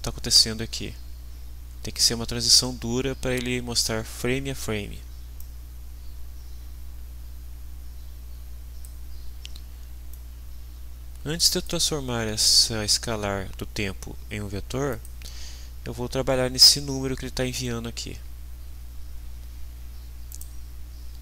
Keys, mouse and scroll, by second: 5.4-9.0 drag, 10.1-11.8 drag, 14.9 click, 20.3 right click.